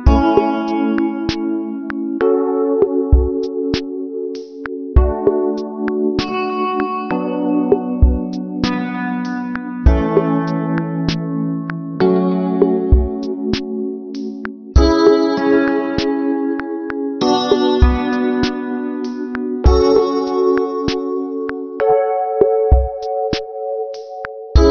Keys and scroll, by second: 0.7 space.